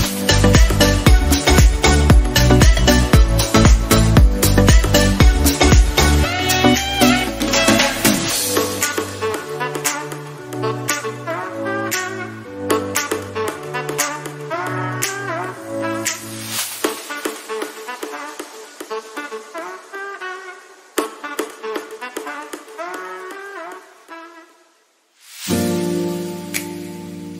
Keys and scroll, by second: 7.1 ctrl+alt+z, 18.1 ctrl+z.